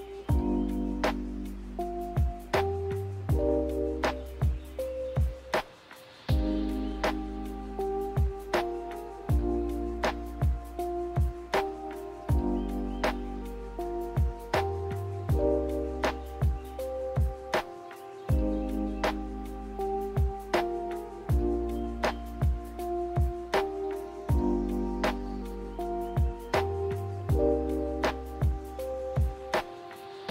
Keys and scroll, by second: 1.2 a.